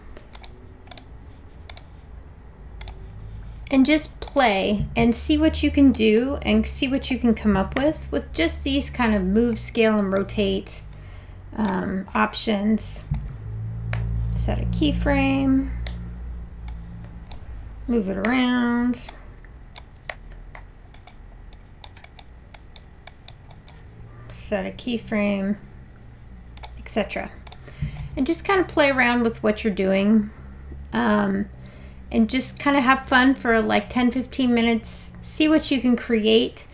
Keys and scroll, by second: 7.8 r, 13.9 s, 15.9 w, 18.3 r, 20.1 r, 20.5 e, 25.5 s.